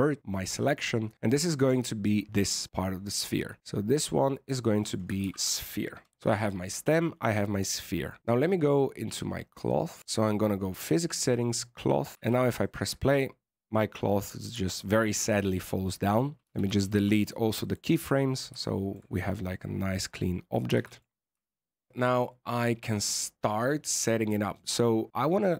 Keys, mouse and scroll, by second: 3.6 click, 3.9 click, 4.0 click, 4.6 click, 4.7 click, 6.1 BackSpace, 7.5 Tab, 8.2 click, 9.0 click, 11.2 click, 12.1 alt+a, 12.1 scroll down 2, 12.5 shift+middle click, 14.6 shift+middle click, 16.4 a, 16.6 a, 16.8 x, 18.6 shift+middle click, 20.7 alt+a, 20.8 click, 21.9 scroll up 2, 22.2-23.2 scroll down 9, 23.2-25.2 scroll down 6.